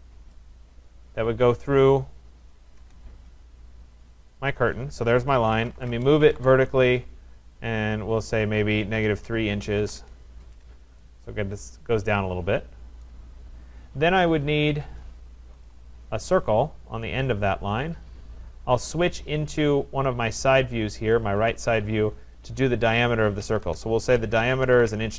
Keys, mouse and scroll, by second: 0.3 right click, 1.8 click, 2.8 Return, 4.5 click, 5.3-6.9 typing, 7.6 click, 8.7-10.3 typing, 13.0 right click, 14.6 Escape, 14.7 Escape, 15.7 click, 17.9 click, 19.5 click, 19.7 click, 20.8-22.6 scroll, 23.4 typing, 23.6 Return, 24.4-25.1 typing.